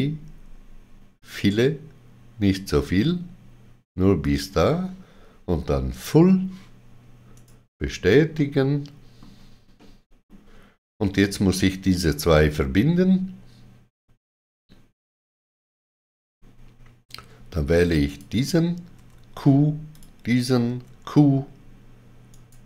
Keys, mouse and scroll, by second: 4.2 click, 5.9 click, 5.9 click, 7.3 right click, 8.3 middle click, 9.7 middle click, 18.0 click, 18.9 q, 19.9 click, 20.6 q, 22.2 right click.